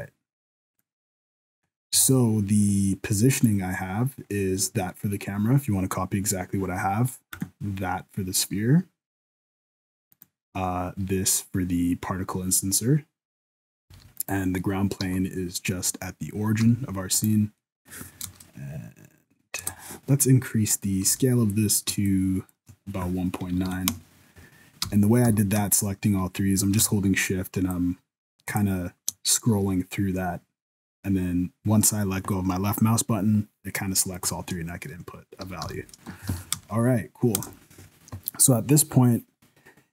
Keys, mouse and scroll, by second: 0.7 click, 1.1 middle click, 1.4-1.8 scroll down 7, 1.7 scroll up 1, 2.0 alt+a, 3.6 right click, 4.3-4.8 scroll up 2, 7.3 right click, 10.1 right click, 13.9 n, 14.2 right click, 15.0 n, 16.6 n, 17.1 right click, 17.6 middle click, 18.2 KP_0, 19.6 KP_0, 20.7 right click, 21.1 n, 22.0 shift+click, 24.9 n, 25.2 n, 27.7 shift+click, 35.6 n, 35.9 middle click, 36.3 alt+a, 36.5 KP_0, 37.3 KP_0.